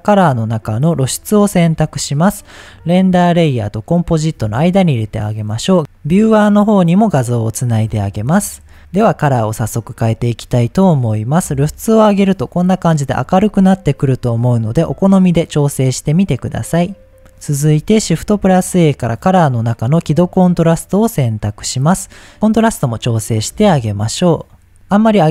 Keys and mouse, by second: 5.1-5.8 drag, 6.0-7.1 drag, 7.4 click, 9.3 click, 10.0 click, 11.6 click, 11.9 click, 12.6 click, 13.0 click, 13.5 click, 14.1 click, 14.5 click, 15.5-17.4 drag, 17.8 shift+a, 21.9 click, 22.8-24.7 drag.